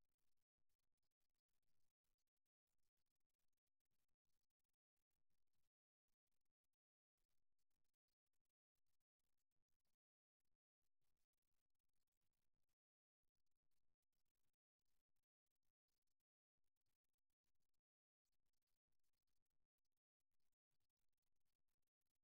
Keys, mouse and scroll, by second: 1.9-5.4 middle drag, 3.1 KP_1, 5.5 middle click, 9.0-10.7 middle drag, 10.7-14.7 right drag, 19.2 middle click, 19.8-21.3 right drag, 21.6-22.2 right drag.